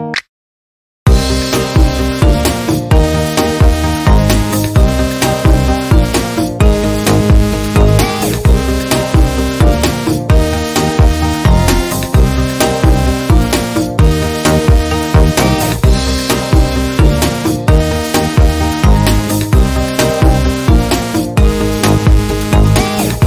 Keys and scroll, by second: 3.6 Down, 4.2 Right, 4.9 Up, 5.6 Up, 6.8 Up, 11.3 Left, 11.4 Left, 12.0 Left, 12.2 Down, 17.3 Down, 17.6 Right, 18.1 Down, 18.6 Left.